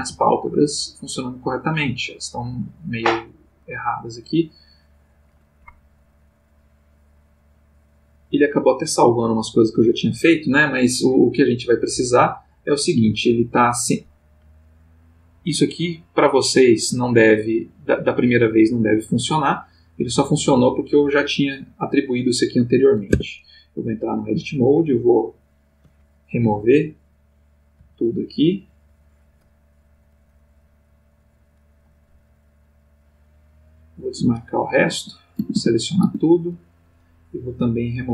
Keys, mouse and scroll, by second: 2.5 Escape, 4.2 click, 6.5 click, 7.6 middle click, 8.2 middle click, 8.7 middle click, 9.5 click, 15.4 click, 15.9 click, 16.4 click, 17.6 click, 18.0 click, 18.4 click, 19.5-20.4 drag, 23.1 Tab, 25.4 click, 26.4 Right, 27.0 click, 27.8 Right, 28.4 click, 33.0 click, 33.6 click, 34.0 click, 34.8 a, 37.3 click.